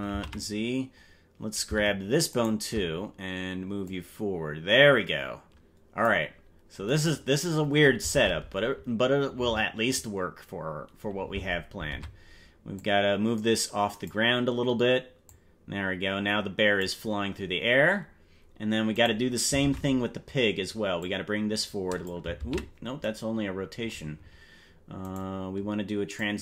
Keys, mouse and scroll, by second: 0.5 ctrl+z, 2.3 shift+right click, 3.8 click, 6.5 scroll down 3, 8.1 ctrl+Tab, 11.3 ctrl+Tab, 11.9 ctrl+Tab, 12.7-14.1 drag, 15.2-16.8 drag, 17.3-17.7 scroll down 3, 17.9 scroll up 2, 19.1 right click, 19.7 ctrl+Tab, 21.0-22.1 drag, 22.9 ctrl+z, 25.3 right click, 26.1-26.4 drag.